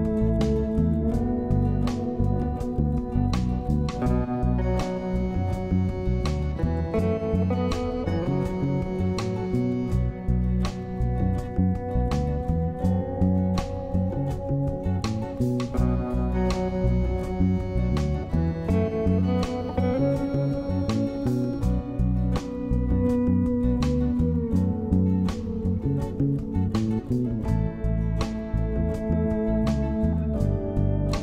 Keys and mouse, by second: 1.8 click, 3.5 click, 5.6-7.3 drag, 8.6-21.0 drag, 24.0 click, 25.2 click, 27.1-28.1 drag, 29.7-31.2 drag.